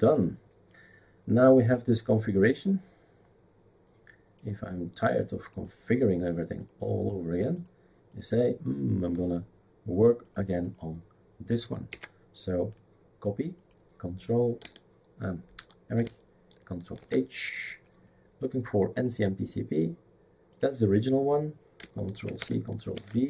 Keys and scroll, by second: 11.9 ctrl+c, 17.0 ctrl+h, 22.2 ctrl+c, 22.9 ctrl+v.